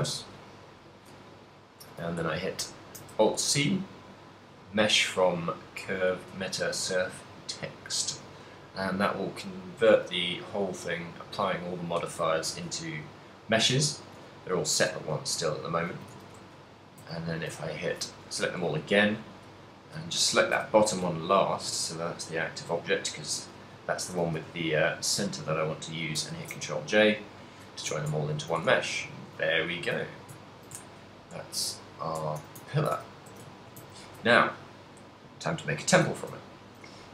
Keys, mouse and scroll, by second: 1.6 middle click, 3.6 alt+c, 10.0 z, 12.5 middle click, 14.9-17.1 typing, 15.6 right click, 19.0 shift+right click, 19.7 middle click, 20.5 KP_1, 21.4 shift+middle click, 21.8 ctrl+middle click, 24.3 g, 25.0 right click, 27.0 ctrl+j, 28.1 Tab, 28.4 a, 28.8 a, 29.3 shift+middle click, 29.5 ctrl+middle click, 30.5 ctrl+middle click, 30.8 shift+middle click, 31.0 shift+middle click, 31.8 ctrl+middle click, 32.3 Tab, 32.7 ctrl+middle click, 32.7 a, 33.0 a, 33.3 a, 33.5 ctrl+middle click, 36.5 ctrl+middle click.